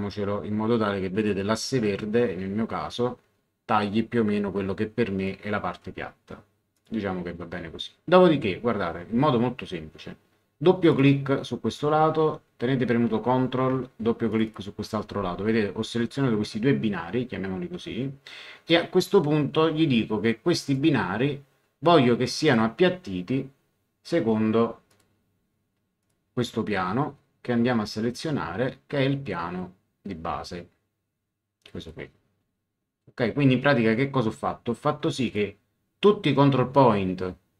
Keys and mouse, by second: 6.7 click, 10.8 click, 14.3 click, 20.6 click, 22.4 click, 24.9 click, 26.0 click, 31.8 click, 35.2 click.